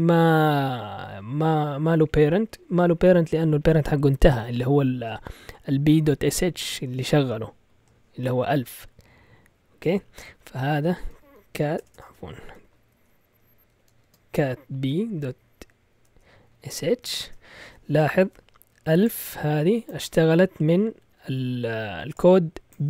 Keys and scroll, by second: 10.7-12.6 typing, 13.7-17.3 typing.